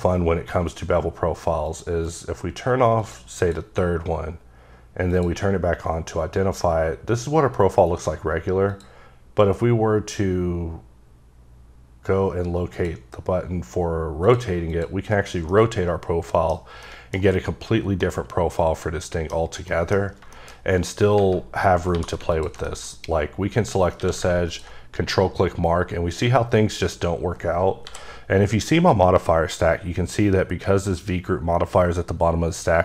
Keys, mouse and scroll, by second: 1.7 click, 2.1 click, 3.0 click, 3.4 click, 4.2-5.1 scroll down 4, 5.1 click, 5.5 scroll down 4, 8.7 click, 12.7 click, 14.7 click, 15.5 middle click, 16.9 middle click, 18.0 middle click, 19.7 middle click, 20.0 scroll up 3, 20.4 shift+middle click, 20.6-21.2 scroll up 2, 21.5 scroll down 2, 21.9 scroll up 1, 22.0 2, 22.3 alt+click, 22.7 middle click, 23.0 scroll up 2, 24.0 q, 24.5 ctrl+click, 26.1-26.7 scroll up 5, 27.9 m.